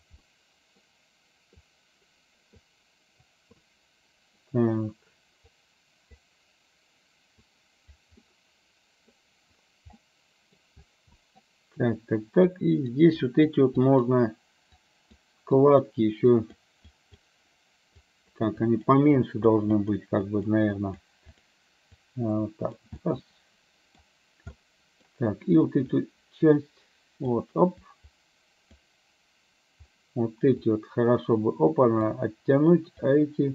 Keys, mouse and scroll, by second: 0.3 middle click, 1.8 click, 2.6 click, 3.7 middle click, 5.6 click, 7.4 click, 8.3 middle click, 10.2 middle click, 11.3 middle click, 12.6 click, 13.3 click, 13.9 click, 14.9 click, 15.6 click, 16.4 click, 17.0 click, 18.0 click, 18.6 click, 19.1 click, 19.8 click, 20.2 click, 20.9 click, 21.5 click, 22.0 click, 23.1-24.1 middle drag, 24.6 middle click, 26.2-27.4 drag, 27.9 click, 30.6-32.3 drag, 33.1 click.